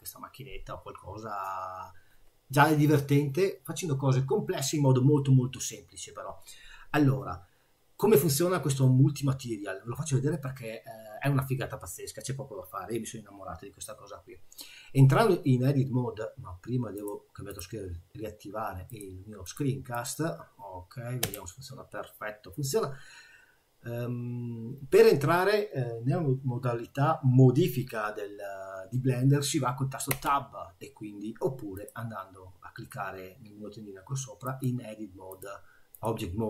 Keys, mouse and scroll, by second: 21.2 n, 30.1 Tab, 31.8 click, 36.0 click.